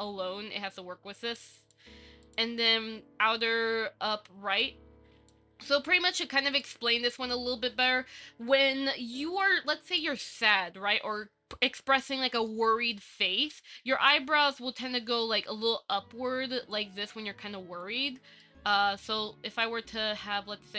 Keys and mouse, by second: 4.9 click, 6.5 click, 8.1 click, 9.6 click, 12.7 shift+middle click, 12.9 click, 16.9-18.0 middle drag, 18.6 shift+middle click, 19.7 KP_1.